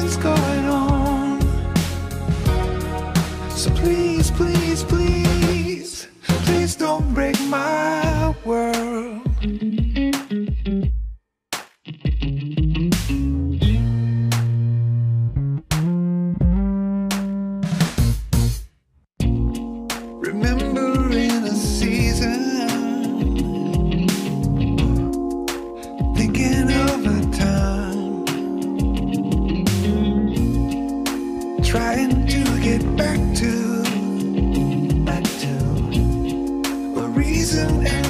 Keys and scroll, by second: 15.5 ctrl+shift+s, 20.2 alt+Down, 20.6 alt+Down, 21.2 alt+Down, 23.0 alt+Up, 23.8 alt+Up.